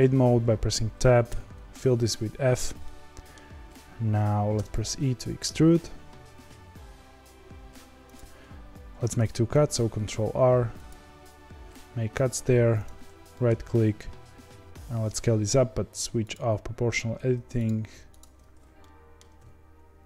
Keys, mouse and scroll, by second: 1.2 f, 2.8-4.5 middle drag, 4.5 e, 9.5 ctrl+r, 13.3 middle click, 13.8 s, 17.5-18.7 drag, 18.7 middle click, 19.3 s.